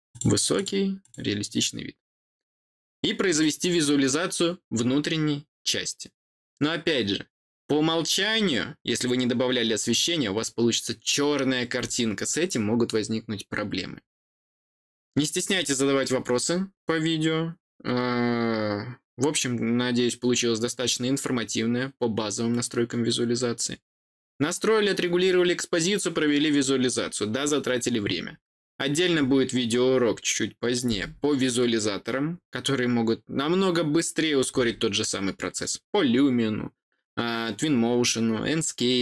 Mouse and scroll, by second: 0.0 click, 0.5 click, 1.0 click.